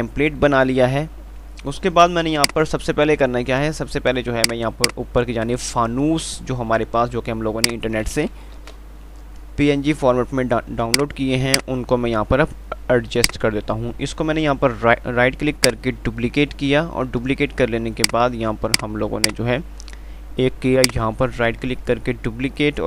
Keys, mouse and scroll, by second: 0.1 click, 0.4 F2, 2.4 click, 2.9 F3, 4.7-7.4 drag, 7.4 F2, 8.8 shift+Page_Up, 10.3 typing, 13.2-15.8 drag, 15.8 ctrl+right click, 18.3-22.8 drag, 20.9 right click.